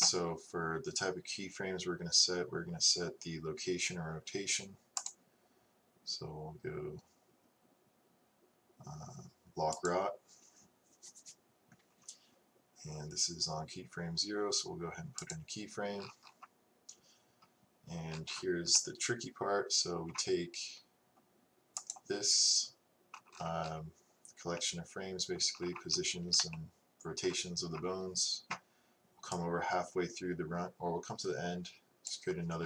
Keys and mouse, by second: 5.0-9.6 right drag, 15.3-19.2 drag, 19.2 middle click, 22.1-25.9 drag, 29.4-31.4 drag.